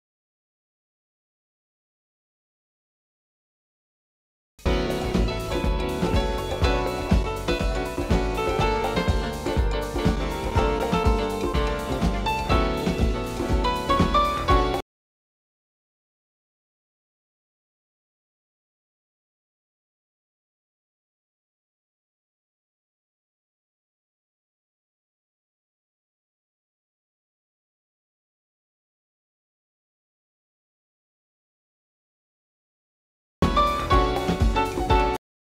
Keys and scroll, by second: 15.7-17.3 typing, 20.1 typing.